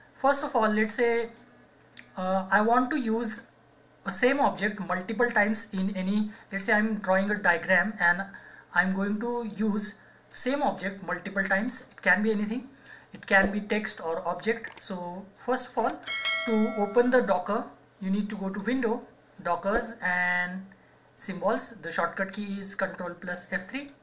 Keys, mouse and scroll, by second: 9.5 click, 18.5 click, 23.8 click.